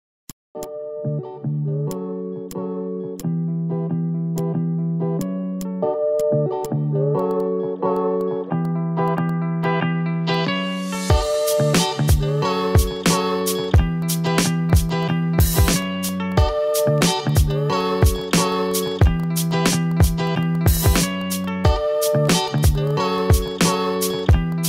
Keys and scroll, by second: 4.9 Down, 8.6 v, 10.8 Down, 10.9 Right, 11.2 Down, 16.1 a, 16.5 ctrl+z, 20.3 ctrl+z, 20.6 v, 21.3 a.